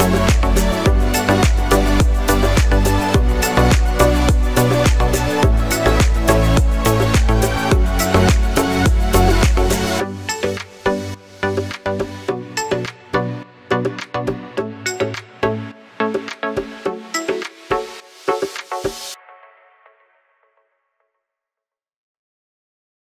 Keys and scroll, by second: 1.0 Left, 1.1 Left, 1.6 Up.